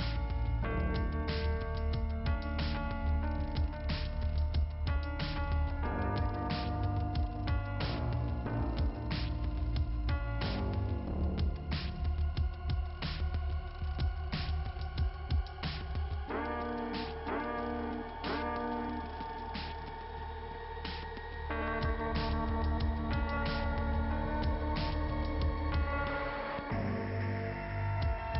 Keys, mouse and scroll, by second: 1.2 click, 3.9 click, 5.0 click, 6.7 click, 7.5 click, 12.0 click, 12.3 scroll down 2, 13.6 middle click, 14.9 middle click, 15.0 click, 15.5 middle click, 16.7 click, 19.2 scroll down 1, 22.9 scroll up 2, 28.1 click.